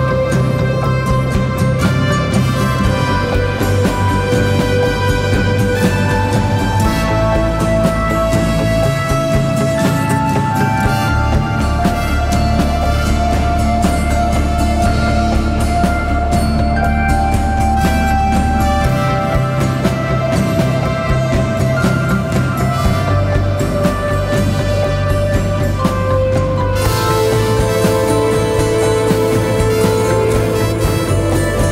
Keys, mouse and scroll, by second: 4.5 click, 4.8-7.2 typing, 5.0-5.3 scroll down 1, 5.6 click, 5.9 click, 6.3 click, 6.7 click, 7.0 click, 7.4 click, 8.2 right click, 9.7-13.0 drag, 13.7 shift+click, 21.4 right click, 22.0 click, 23.3-24.9 alt+drag, 26.3 scroll up 1, 26.9-29.0 typing, 27.3 click, 28.1 click, 28.4 click, 28.4 click, 29.1 click.